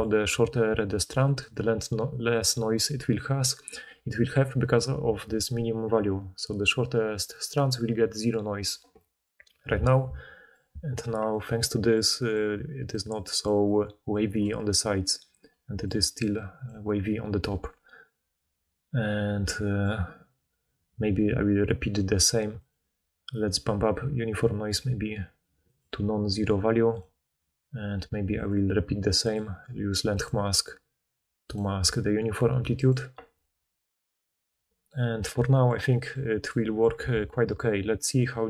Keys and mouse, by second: 0.3-1.1 d, 1.5-4.2 drag, 1.5-4.2 middle drag, 1.5-4.2 right drag, 12.6-14.4 typing, 15.9 d, 16.6 d, 16.8 d, 17.4 d, 30.3-31.5 middle drag, 31.5-32.7 drag, 32.7 middle click, 32.9-35.8 drag, 35.8-38.1 middle drag, 37.1 alt+a.